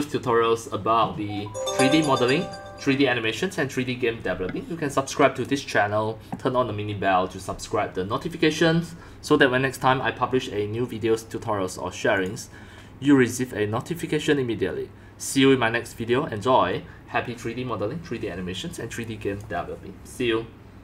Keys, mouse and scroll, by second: 12.1 click, 12.5 click, 13.9-17.0 drag, 18.2-18.8 drag, 19.2 click.